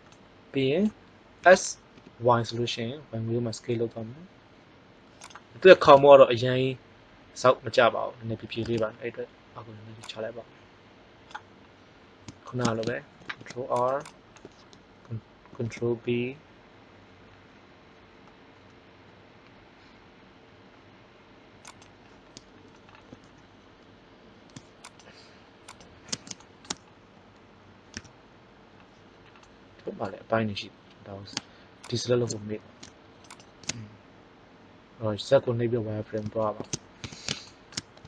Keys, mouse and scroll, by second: 1.3 s, 9.9 click, 13.2 ctrl+r, 14.0 click, 15.4 ctrl+b, 21.8 click, 24.8-26.6 right drag, 26.3 middle click, 27.9 z, 29.3 middle click, 31.8-34.9 drag, 36.3 middle click, 36.9 z.